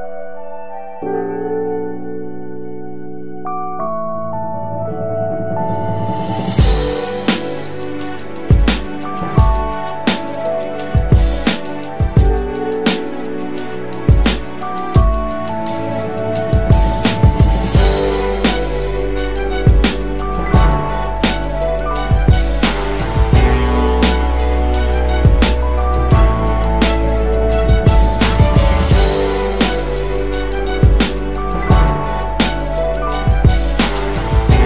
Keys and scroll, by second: 19.9 ctrl+c, 22.4 b.